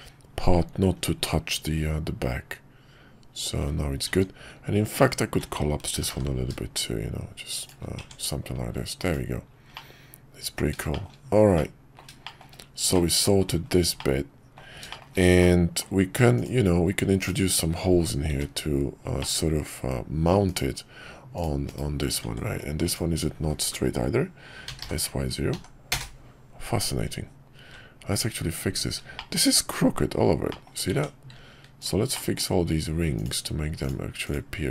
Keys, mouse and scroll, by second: 1.2-3.6 middle drag, 4.1 Tab, 4.9 alt+click, 5.9 g, 7.9 Tab, 9.0-9.7 drag, 9.7-10.6 middle drag, 10.9 shift+middle click, 11.5-12.0 middle drag, 12.2 shift+middle click, 12.9-13.2 middle drag, 14.0-14.6 middle drag, 14.9 shift+middle click, 15.4-15.8 middle drag, 19.2-20.3 middle drag, 20.5 /, 21.6 /, 22.2 Tab, 24.6 s, 27.6 `, 29.2 shift+middle click, 30.5 middle click, 30.9 Tab, 31.8 click, 32.1 middle click.